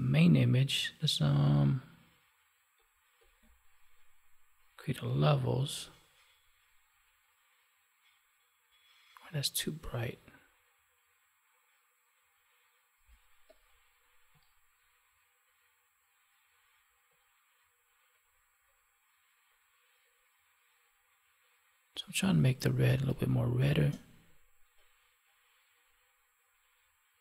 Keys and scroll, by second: 22.9 space.